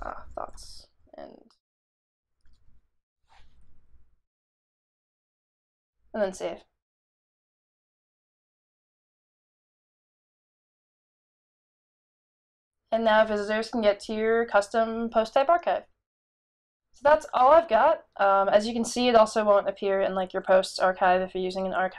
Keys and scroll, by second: 0.0-0.6 typing, 1.6 typing.